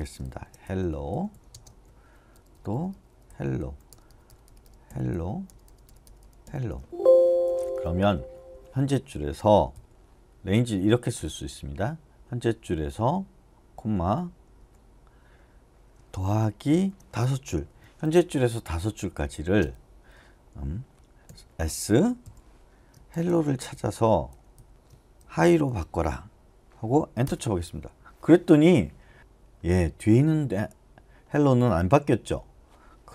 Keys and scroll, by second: 0.0-9.7 typing, 1.7 Escape, 14.6 ,, 17.7 5, 19.6 space, 21.3-26.2 typing, 27.2 Return.